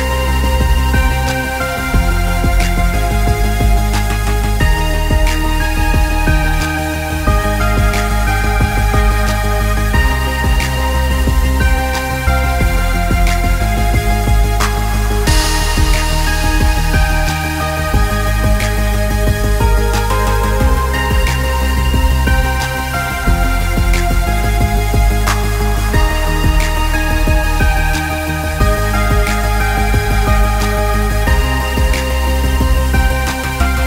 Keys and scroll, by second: 12.3 ctrl+g, 14.3 ctrl+c, 14.6 ctrl+t, 15.2 ctrl+Return, 19.6 ctrl+g, 20.1 ctrl+c, 22.8 ctrl+c.